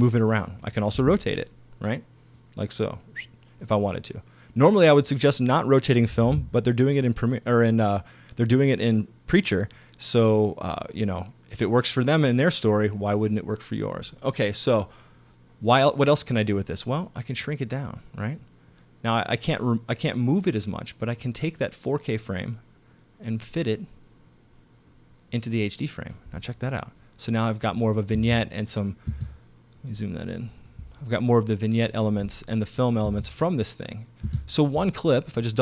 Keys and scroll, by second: 6.3 super+z, 28.2 space, 33.1 space, 34.3 space.